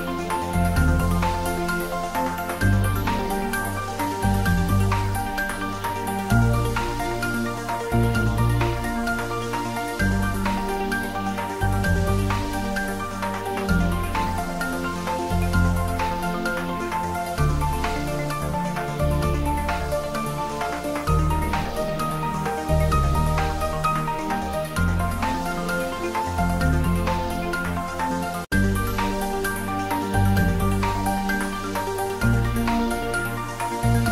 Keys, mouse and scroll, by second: 0.5 click, 0.8 middle click, 1.1 scroll up 1, 2.6 click, 4.7 click, 6.5 scroll down 1, 6.8 middle click, 7.8 click, 10.3 click, 12.1-13.2 scroll down 1, 13.4 click, 13.6 scroll down 1, 14.0 click, 14.2 scroll down 1, 14.7 click, 14.9 space, 16.0 click, 16.7 scroll up 1, 18.0 click, 18.3 space, 19.4-21.2 middle drag, 21.2-22.6 scroll down 1, 23.3 click, 23.7 space, 24.7 click, 24.9 scroll up 1, 25.2-26.7 middle drag, 26.7 Tab, 27.2 ctrl+r, 27.3 scroll up 1, 28.6 click, 29.1 ctrl+r, 29.3-30.1 scroll up 3, 30.1 click, 30.7 Tab, 31.0 middle click, 31.5 space, 32.9-34.1 middle drag.